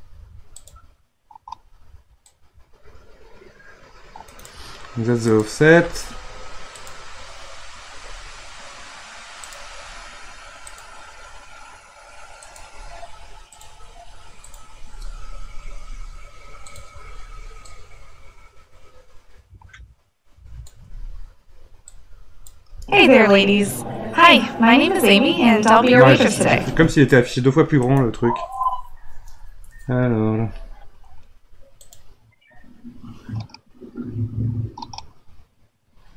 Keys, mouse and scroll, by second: 0.5-4.8 drag, 5.2 click, 6.7-12.5 drag, 13.5-14.6 drag, 15.6 Delete, 16.7 click, 17.0 Delete, 17.6-20.7 drag, 21.9 click, 22.7 space, 26.7 space, 27.8-30.8 right drag, 31.8-34.9 drag.